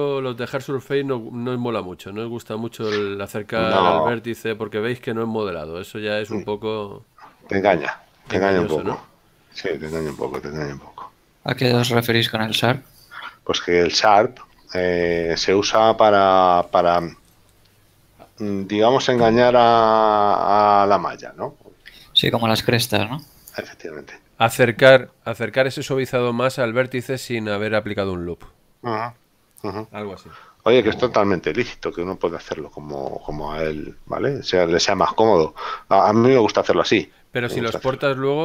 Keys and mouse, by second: 0.6 Tab.